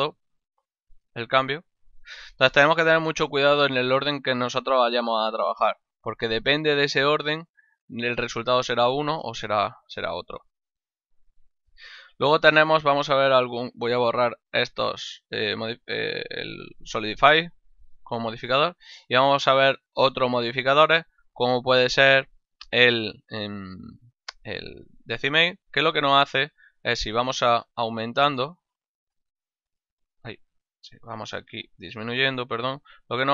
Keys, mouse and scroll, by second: 1.7 click, 3.9 click, 5.2 click, 11.3 click, 13.5 click, 15.9 click, 25.4 click, 27.9 click, 30.2 z, 31.3 click.